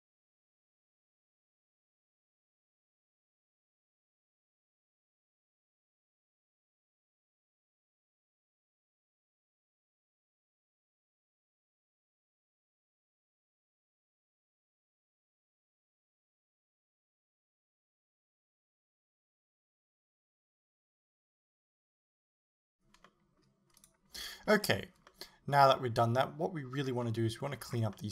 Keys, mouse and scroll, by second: 0.0-20.0 typing, 0.0 click, 0.3 click, 1.0 shift+right click, 1.3-1.6 shift+scroll down 1, 1.6 shift+middle click, 1.9 click, 2.1 click, 2.3 click, 2.5 click, 3.1 middle click, 3.4 scroll up 2, 3.7 click, 3.8 right click, 4.2 click, 4.3 scroll down 1, 4.4 middle click, 4.8 shift+middle click, 5.0 right click, 5.6 click, 6.0 click, 6.3 shift+middle click, 6.9 right click, 7.3 click, 7.7 scroll up 1, 8.0 click, 8.5 middle click, 8.7 click, 8.8 right click, 8.9 click, 9.1 click, 9.2 middle click, 9.3 click, 9.6 right click, 9.7 shift+right click, 9.9 click, 10.0 click, 10.2 shift+middle click, 10.8 right click, 11.3 click, 12.1 right click, 12.5 click, 12.8 right click, 13.1 click, 13.2 middle click, 13.6 right click, 14.0 scroll up 1, 14.2 click, 14.3 right click, 14.8 click, 14.8 scroll down 2, 14.9-16.5 middle drag, 15.7-16.2 scroll up 2, 16.5 click, 16.9 click, 17.3 right click, 17.5 click, 18.1 middle click, 18.5 shift+middle click, 18.9 click, 19.1 click, 19.7 right click, 20.1 right click, 20.2 right click, 20.7 right click, 21.2 click, 21.3 middle click, 21.8 middle click, 22.0 l, 22.1 KP_3, 22.2 ctrl+KP_1, 22.5 g, 22.6 click, 23.1 middle click, 23.8 right click, 25.1-28.1 middle drag, 26.8 scroll down 2, 27.6-28.0 scroll up 2.